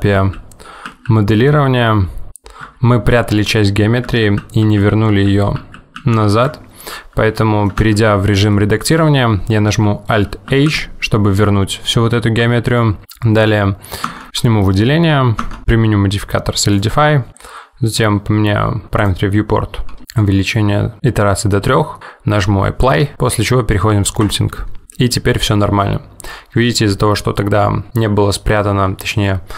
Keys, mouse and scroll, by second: 0.2 ctrl+z, 1.0 ctrl+z, 4.3 ctrl+z, 4.7 ctrl+z, 5.7 ctrl+z, 6.0 ctrl+z, 7.5 middle click, 7.9 Tab, 8.6 middle click, 10.5 alt+h, 14.2 Tab, 14.3 Tab, 14.5 click, 15.5 Tab, 16.8 click, 18.9 click, 19.1 click, 22.9 click.